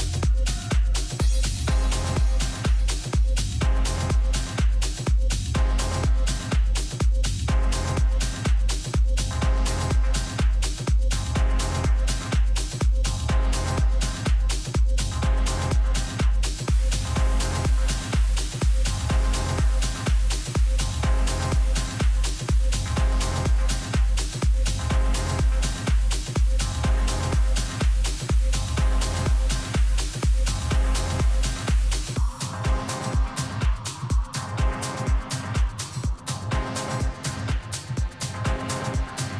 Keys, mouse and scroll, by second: 1.6 a, 2.8-4.7 right drag, 3.4 a, 4.5 b, 5.4-7.6 middle drag, 7.8 KP_7, 8.6-10.4 middle drag, 10.4-12.4 drag, 13.4 middle click, 15.2 a, 17.2 Tab, 18.0 a, 18.7 right click, 21.7 s, 26.5-28.2 middle drag, 28.4 middle click, 28.7 z, 30.6 middle click, 35.3-38.1 middle drag, 37.6 KP_3, 38.1 z, 38.6-39.3 middle drag.